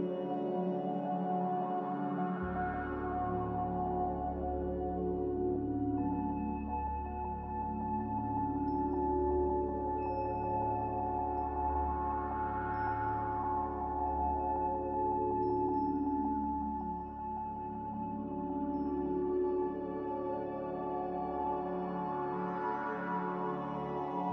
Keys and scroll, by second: 2.5 5, 3.5 Return, 21.3 g.